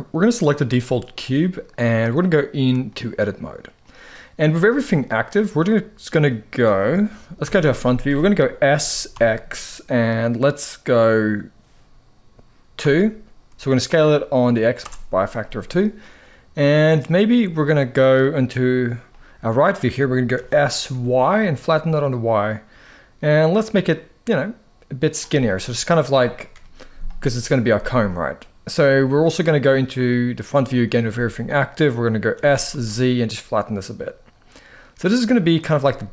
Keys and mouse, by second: 0.5 middle drag, 2.1-2.9 drag, 3.5 middle click, 5.0-6.2 middle drag, 7.1 KP_1, 8.6 s, 8.8 x, 12.5 2, 14.5 Return, 15.7-17.4 middle drag, 18.8 middle click, 20.0 s, 20.6 y, 24.7 click, 25.0 middle click, 26.2 KP_1, 30.8 a, 32.0 s, 32.4 z, 35.3 click, 35.5-36.1 middle drag.